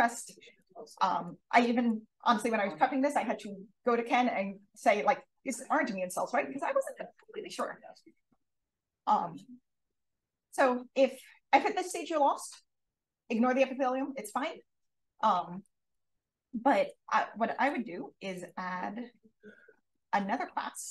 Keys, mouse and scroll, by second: 0.2-0.5 drag, 0.8-1.2 drag, 1.5 click, 7.1-7.5 drag, 8.0 d, 8.3 click, 15.5-15.9 drag, 16.5 drag, 17.3 d, 19.8 click, 20.7-20.9 typing.